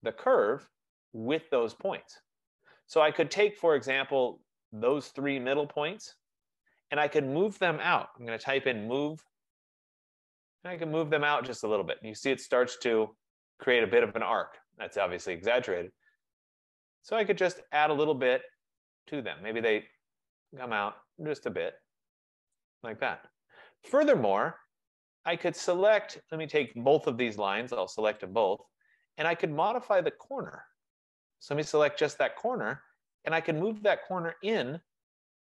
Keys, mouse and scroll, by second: 0.5 right click, 1.1 middle click, 1.3 middle click, 1.4 middle click, 5.0 click, 8.2-8.5 typing, 8.3-15.3 drag, 8.8 Return, 10.8 typing, 22.7-24.5 drag, 26.1 click, 26.8 click, 28.4 shift+click, 29.3 shift+scroll, 29.5 F15, 30.8 click.